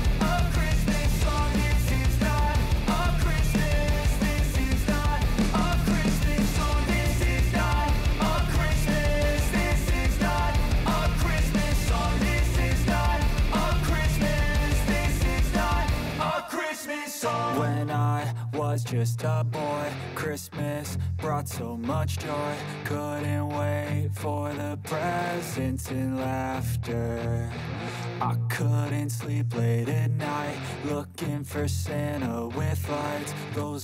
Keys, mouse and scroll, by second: 4.7 Return, 5.2 click, 7.1 F9, 8.4-14.3 drag, 14.3-16.3 drag, 16.3 space, 19.0-20.6 drag, 20.6-22.2 drag, 22.5 space, 24.3 click, 26.4 ctrl+d, 27.3 click, 28.9 F4, 29.6 click, 32.3-33.4 typing.